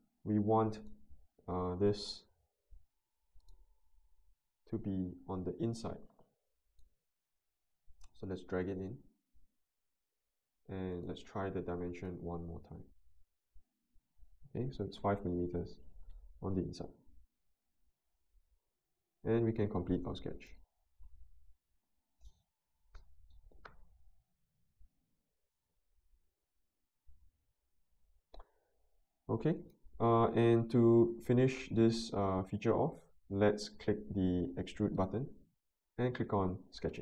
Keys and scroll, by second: 2.2 Delete, 3.8 Delete, 14.9 5, 15.2 Return.